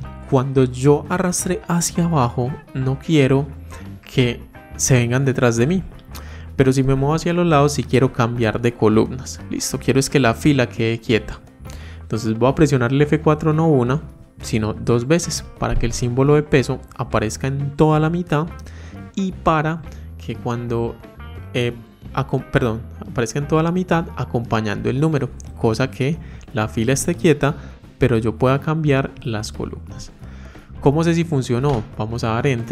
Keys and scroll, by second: 12.8 F4.